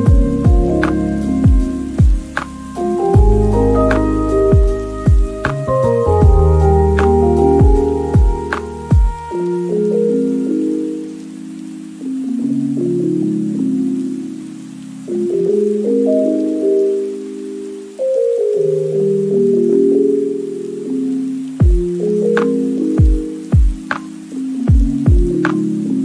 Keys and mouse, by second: 0.0-0.8 typing, 2.3-6.8 typing, 2.5 middle click, 3.9 middle click, 4.0 shift+Tab, 4.1 middle click, 4.2 shift+Tab, 4.8 shift+middle click, 5.1 shift+middle click, 5.7 middle click, 7.0 middle click, 8.2-10.1 typing, 10.3-10.7 middle drag, 10.8 ctrl+s, 10.8 shift+middle click, 11.2 shift+middle click, 11.5 middle click, 11.7-13.1 typing, 12.0 shift+middle click, 12.1 Tab, 12.6 shift+Tab, 12.6 shift+middle click, 13.1 shift+middle click, 14.2-19.0 typing, 14.5 click, 15.9 middle click, 18.0 middle click, 19.3-20.0 middle drag, 19.8 Tab, 20.1 3, 20.3 ctrl+KP_3, 20.4 ctrl+KP_1, 20.9 ctrl+KP_1, 21.2 b, 21.4 middle click, 21.8 KP_1, 22.1 c, 22.5 middle click, 22.9 middle click, 23.2 shift+middle click, 23.4 ctrl+KP_1, 23.8 shift+click, 23.9 shift+click, 24.3 shift+middle click, 24.4 g, 24.4 y, 24.6 o, 25.8 middle click.